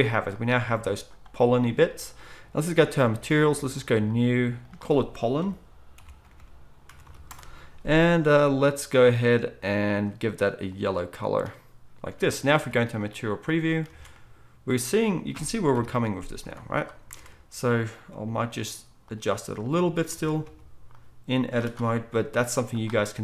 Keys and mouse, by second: 12.1 alt+a, 12.5 z, 13.8 alt+a, 15.1 click, 15.1 middle click, 15.7 KP_1, 16.4 z, 17.1 Tab, 18.2 g, 20.1 alt+a, 20.4 c, 21.9-23.2 middle drag, 21.9 g, 23.0 z.